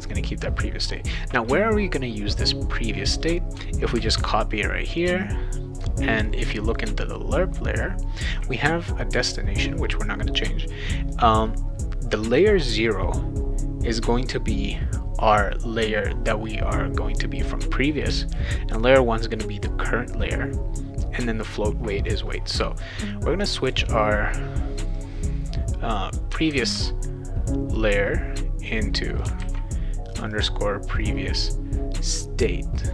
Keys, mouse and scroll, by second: 3.0 click, 3.9 ctrl+c, 5.0 click, 6.7 click, 23.7 click, 24.9-26.2 drag, 26.5 ctrl+v, 27.8-29.2 drag, 29.4 ctrl+v, 30.1 click, 30.3 click.